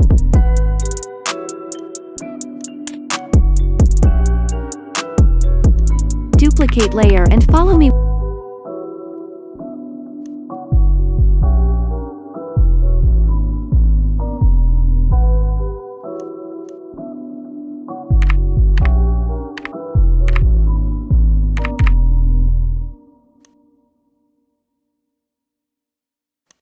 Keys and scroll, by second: 7.0 ctrl+d, 18.3-20.2 typing, 21.5 typing.